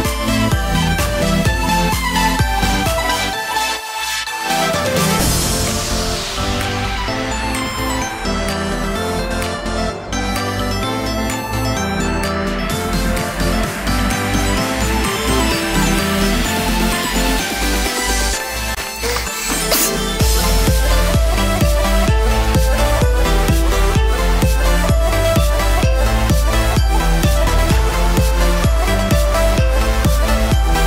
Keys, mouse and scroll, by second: 0.1 alt+a, 1.9 l, 5.5 click, 13.2 click, 17.6 click, 25.0 Tab, 25.6 alt+a, 25.8-26.9 scroll down 4, 26.2 middle click, 29.4-29.8 scroll up 2, 29.8 shift+middle click, 30.6 click.